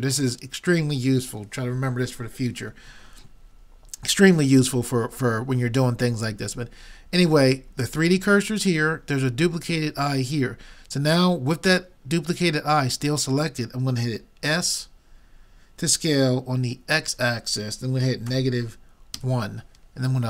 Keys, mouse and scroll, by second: 14.6 s.